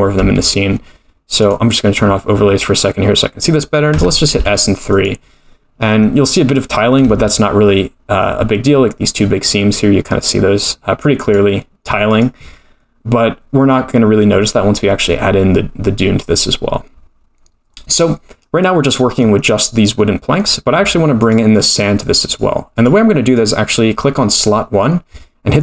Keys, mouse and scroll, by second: 0.2 a, 1.4 click, 3.9 s, 7.1 Tab, 11.2-12.2 drag, 18.3-20.4 middle drag, 21.2-22.3 drag, 22.7 click, 23.3-25.6 drag.